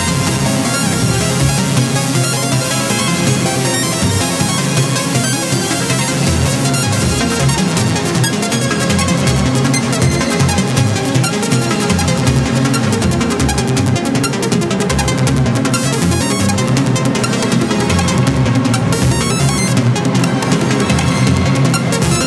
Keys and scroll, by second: 11.2 Delete.